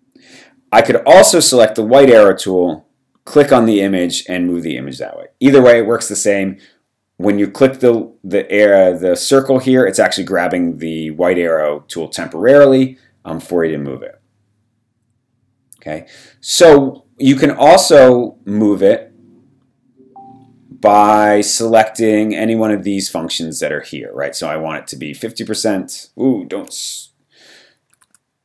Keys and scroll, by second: 28.0 super+z.